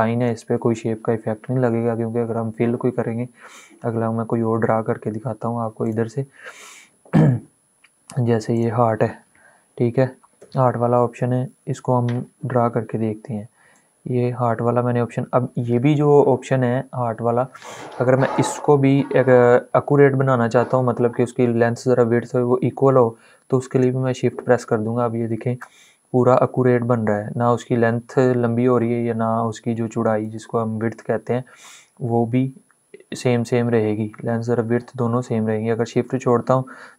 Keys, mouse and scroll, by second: 5.5 click, 5.6 click, 8.2 click, 13.4-23.4 drag.